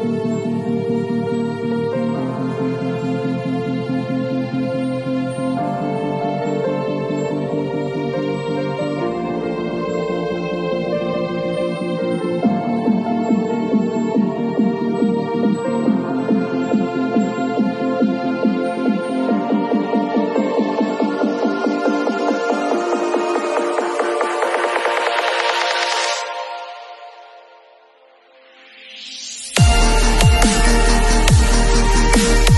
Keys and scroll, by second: 11.5 super+z, 12.0 alt+super+z, 14.4 super+z, 21.8 v, 30.4 m.